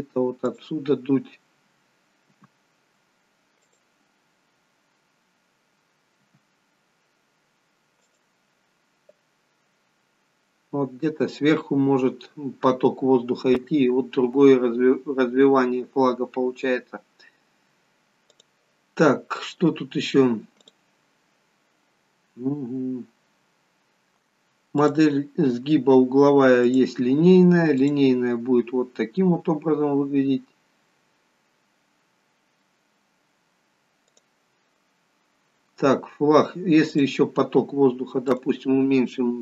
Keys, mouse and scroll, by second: 1.0-2.4 scroll down 2, 2.4 g, 10.5-14.0 scroll up 3, 18.4 click, 21.0 click, 24.8 click, 34.2 click, 35.9-36.9 scroll down 2, 36.9 click, 36.9-38.1 scroll down 4, 38.3 click.